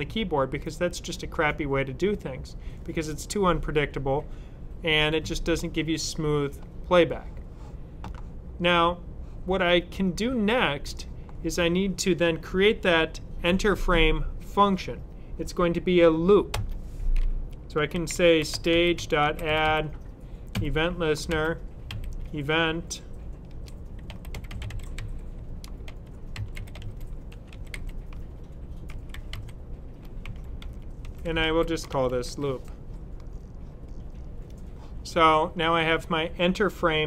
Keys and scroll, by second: 17.7 s, 18.9-21.8 typing, 23.4-32.1 typing.